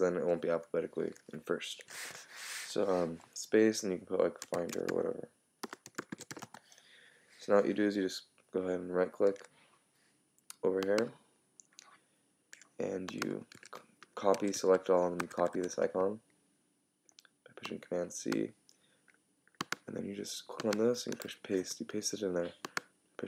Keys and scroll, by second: 4.6 shift+f, 6.4 Return, 13.5 super+a, 15.2 super+c, 21.5 super+v.